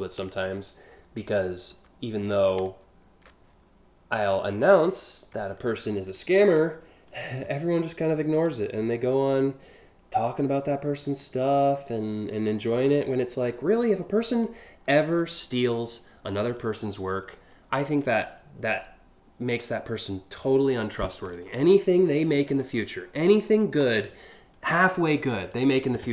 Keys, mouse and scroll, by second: 1.2 ctrl+z, 3.7 click, 6.0 ctrl+t, 8.0-9.7 drag, 10.7-14.0 drag, 22.8 scroll up 1, 26.0 scroll up 4.